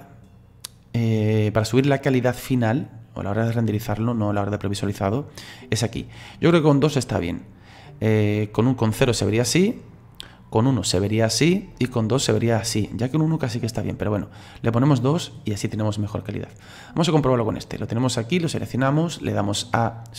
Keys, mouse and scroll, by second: 3.6 click, 6.0 click, 8.1 click, 10.7-14.8 drag, 14.9 click, 18.0 right click, 19.4-20.1 drag.